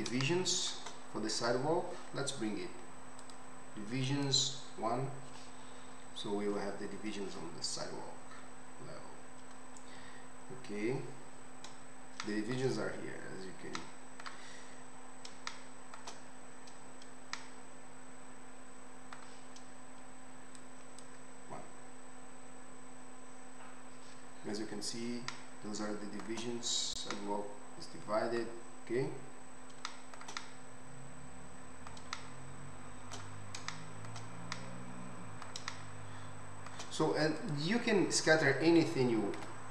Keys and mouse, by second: 1.5-3.2 middle drag, 3.2 click, 3.3 middle click, 4.0-37.5 drag, 37.5-39.7 middle drag.